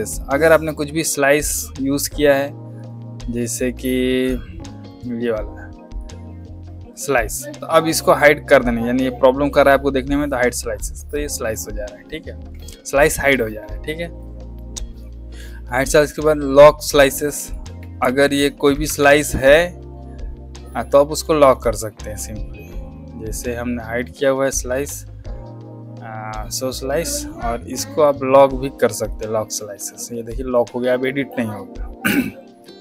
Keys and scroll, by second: 13.0 ctrl+z, 18.0 ctrl+z, 18.9 shift+z.